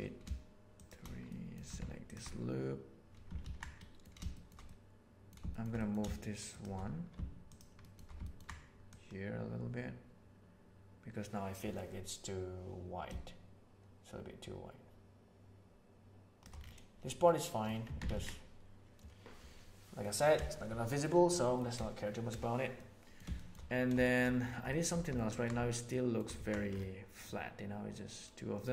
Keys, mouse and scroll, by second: 1.2 middle click, 3.4 ctrl+z, 3.7 middle click, 4.3 shift+middle click, 4.6 middle click, 5.4 shift+middle click, 6.4 shift+right click, 7.8 shift+middle click, 8.2 ctrl+middle click, 8.9-16.4 middle drag, 17.2 middle click, 17.8 Tab, 18.1 alt+a, 18.2-20.0 middle drag, 20.4-21.0 shift+middle drag, 21.2-21.5 middle drag, 22.7-23.1 middle drag, 23.3 shift+middle click, 24.0 shift+middle click, 24.6 shift+middle click, 25.1 ctrl+middle click, 25.9 shift+middle click, 27.2-28.6 middle drag.